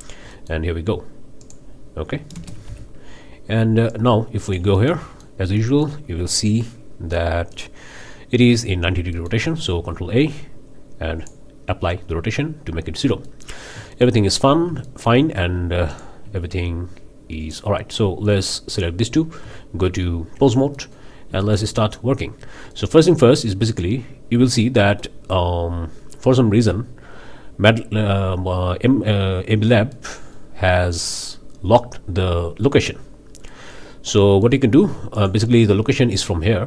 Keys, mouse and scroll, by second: 0.0 scroll down 2, 0.3-0.7 drag, 1.4-1.7 drag, 2.3 shift+space, 2.7 shift+g, 3.9-5.4 drag, 5.4 shift+scroll up 2, 5.7 shift+click, 7.5-7.8 drag, 9.1-9.5 ctrl+drag, 9.7 ctrl+a, 11.2 drag, 13.2 click, 13.4-13.8 scroll up 3, 13.9-14.5 shift+middle drag, 14.5 shift+scroll up 2, 14.8-15.2 shift+middle drag, 15.2 shift+scroll down 2, 15.9 drag, 17.4 click, 18.7 shift+click, 19.4 shift+Tab, 20.7 click, 20.9 middle click, 21.1 scroll up 3, 21.4-21.7 shift+middle drag, 21.8-22.2 shift+middle drag, 22.7 middle click, 23.7 click, 24.4-25.2 middle drag, 29.9 middle click, 33.5-34.6 middle drag, 35.1 click.